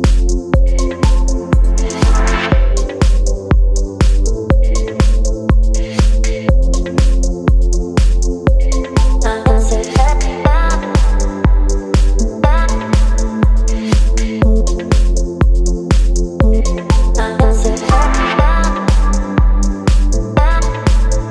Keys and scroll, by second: 0.3 Return, 5.8 KP_3, 5.9 KP_5.